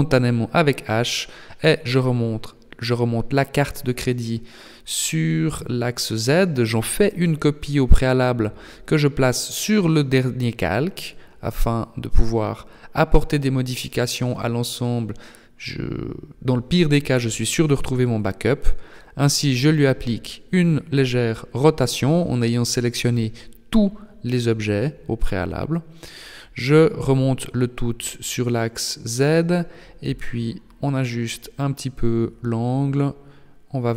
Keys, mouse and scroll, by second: 1.4 shift+d, 4.6 m, 8.3 click, 9.2 click, 11.7 click, 12.8-14.3 scroll up 2, 14.3 b, 17.6 r, 21.2 g, 26.6 r, 30.1 click, 30.7 g.